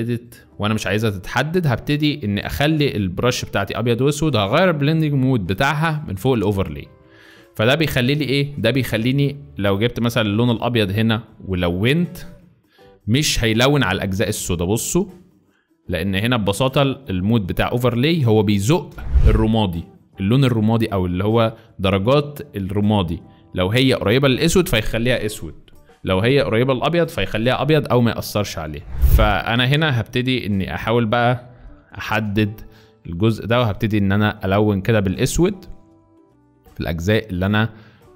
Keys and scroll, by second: 1.7 [, 1.8 [, 2.1 [, 2.2 [, 8.8 x, 18.4 space, 29.4-30.3 typing, 31.4-32.0 typing.